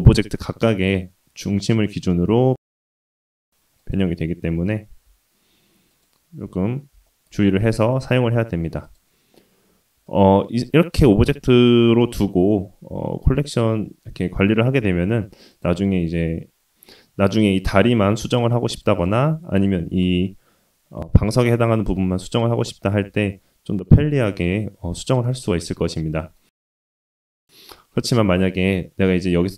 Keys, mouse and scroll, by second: 3.1 g, 4.8 r, 7.0 shift+middle click, 7.4-7.8 middle drag, 8.3 shift+middle drag, 8.8 click, 10.0 click, 12.0 scroll up 2, 14.8-15.2 shift+middle drag, 15.5 click, 16.8 Tab, 16.8-17.6 scroll up 2, 17.6 middle click, 18.0 Tab, 18.4 click, 18.9 click, 19.3 Tab, 19.5 click, 21.8 Tab, 23.0 Tab, 23.3-23.8 middle drag, 25.1-26.3 middle drag, 26.4-26.8 scroll down 2, 26.8-27.3 scroll up 2, 27.3-28.3 scroll down 1, 28.3-29.4 drag.